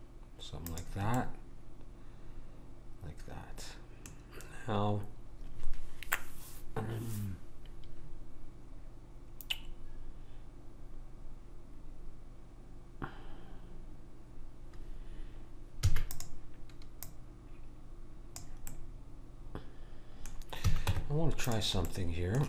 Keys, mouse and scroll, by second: 1.2-3.0 middle drag, 15.8 e, 17.0 click, 18.7-20.6 middle drag, 20.6 a, 20.9 Tab, 21.9-22.4 middle drag.